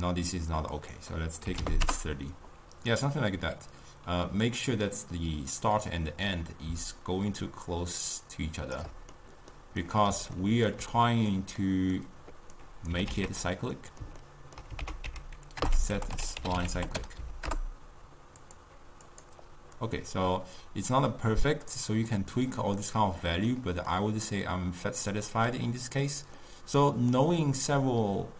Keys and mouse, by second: 0.8-3.1 drag, 3.1-6.1 middle drag, 6.9-9.3 shift+drag, 9.3-12.7 middle drag, 12.7 click, 13.0 g, 13.9-14.9 middle drag, 14.9 ctrl+a, 19.2 click, 22.3-28.3 middle drag.